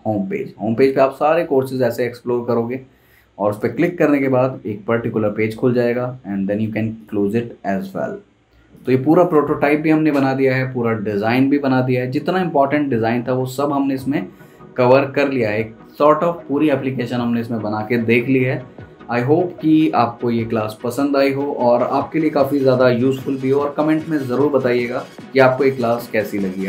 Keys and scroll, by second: 14.3 super+s.